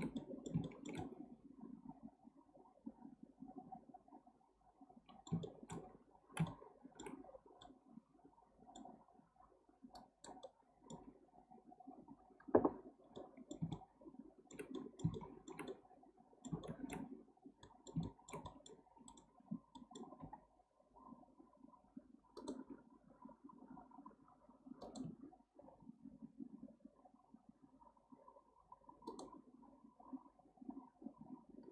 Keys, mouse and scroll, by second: 5.4-7.2 shift+middle drag, 7.2-7.6 scroll up 2, 7.6-9.0 middle drag, 9.0-9.9 scroll down 1, 9.9 click, 10.4-12.9 middle drag, 12.9 scroll down 2, 13.2-16.6 middle drag, 16.6-17.6 scroll up 2, 17.6-18.4 middle drag, 18.4 scroll up 1, 18.5-19.5 middle drag, 19.5 scroll down 1, 19.8 middle click, 20.2 k, 25.6 k.